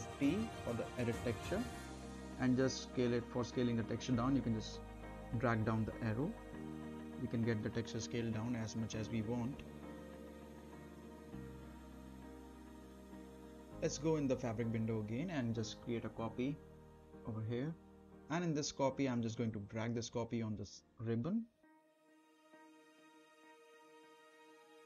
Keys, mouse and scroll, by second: 2.7-3.9 drag, 4.5-5.0 right click, 5.2 click, 5.9 middle click, 6.1 scroll down 1, 6.4-7.4 right drag, 7.8-9.9 drag, 10.8 scroll up 1, 11.1-12.4 right drag, 12.5 scroll down 1, 12.7-13.7 middle click, 13.5 right click, 13.7 scroll down 1, 13.9 middle drag, 15.1 click, 15.7 right click, 17.0-21.0 drag, 21.6 middle click, 21.8 a, 22.5-23.1 scroll up 1, 23.1-23.6 middle click, 23.7 click, 24.1-24.5 scroll down 1, 24.5-24.8 middle click.